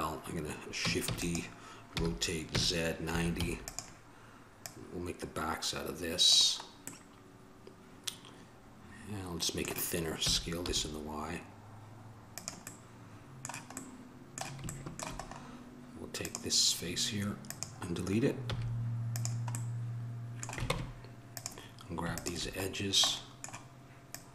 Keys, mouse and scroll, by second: 1.3 shift+d, 2.2 r, 4.8-6.5 drag, 14.5-17.7 middle drag, 20.9 ctrl+Tab, 23.0 click.